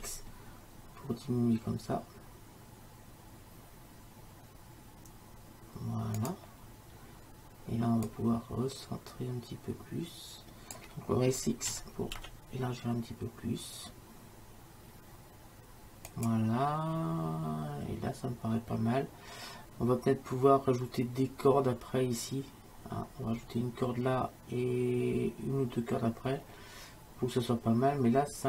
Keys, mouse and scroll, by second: 8.1-10.0 drag, 11.8 s.